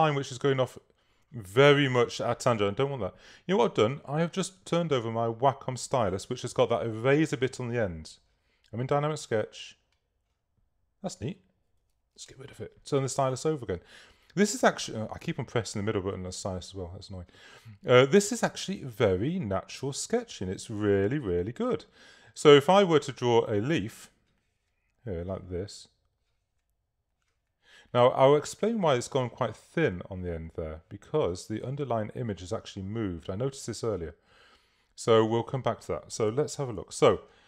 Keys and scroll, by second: 36.8 v.